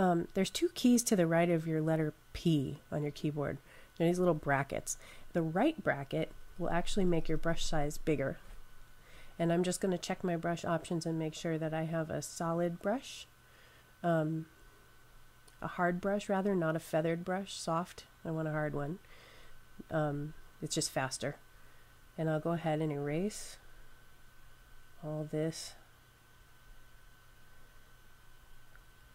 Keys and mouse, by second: 5.3-6.8 typing, 9.8 click, 12.2 click, 14.1 typing, 19.7 click.